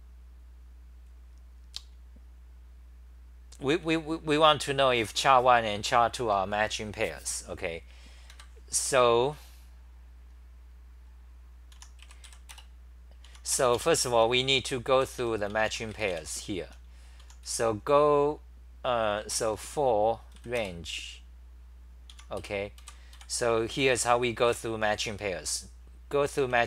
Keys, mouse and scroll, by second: 4.8-5.5 typing, 8.3 ctrl+g, 11.8 u, 13.3 Home, 13.5-17.2 typing, 19.3 BackSpace, 22.2-23.7 typing, 26.4 ctrl+g, 26.4-26.6 typing.